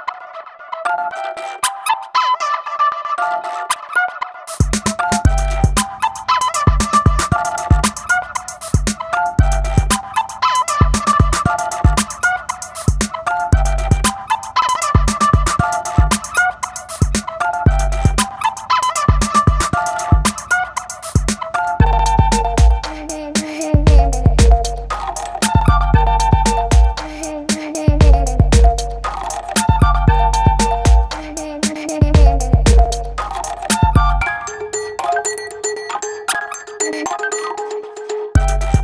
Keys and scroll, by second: 2.5 ], 4.1 x, 4.6 [, 8.4 x, 10.7 v, 16.4 shift+super+n, 16.7 shift+super+Return, 17.4 b, 24.0 space, 25.1 2, 25.6 ], 28.9 ], 30.8 ], 34.7 [, 38.1 v.